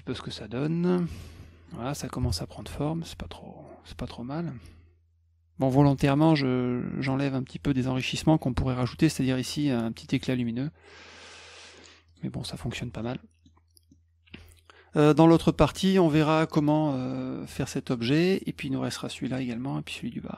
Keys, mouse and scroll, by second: 0.8 click, 1.1 click, 1.4 middle click, 2.8 middle click, 8.9 middle click, 12.1 click, 13.0 middle click, 13.9-15.7 middle drag.